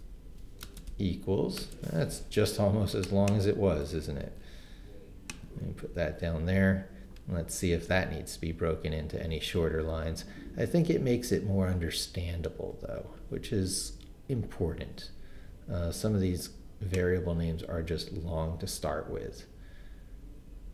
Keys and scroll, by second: 0.0-1.6 typing, 4.2 super+c, 5.6 super+v.